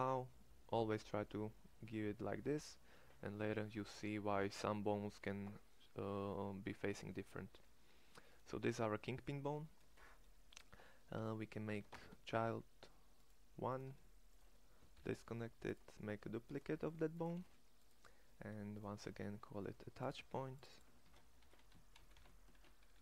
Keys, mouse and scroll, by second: 7.4 middle click, 11.5 e, 14.7 alt+p, 16.6 g, 17.1 shift+d, 21.3 t.